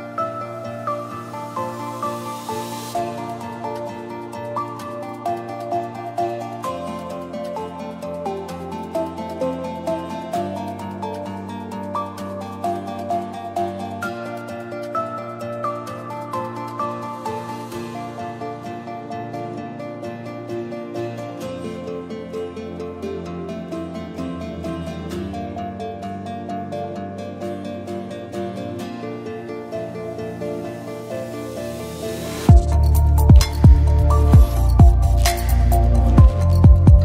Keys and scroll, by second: 0.4 space, 6.8 space, 6.9 Down, 8.9 Up, 23.9-25.3 typing.